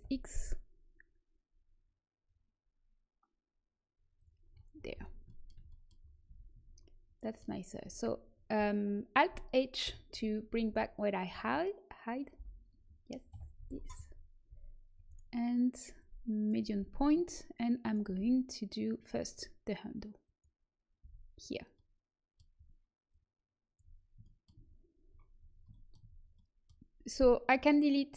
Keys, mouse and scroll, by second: 4.7 middle click, 6.2 z, 6.5 Tab, 7.7 Tab, 9.8 alt+h, 10.6 a, 12.3 l, 13.2 KP_1, 13.5 z, 14.4 s, 15.8 click, 16.8 s, 18.0 g, 20.9 z, 23.0-24.9 drag, 24.9-26.3 middle drag, 27.3-28.1 middle drag.